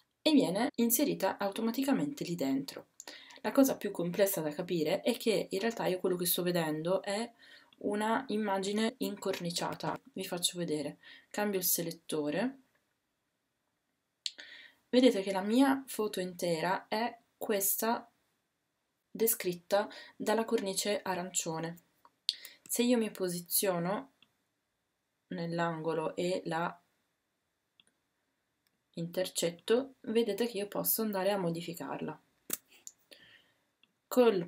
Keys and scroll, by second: 9.6 w.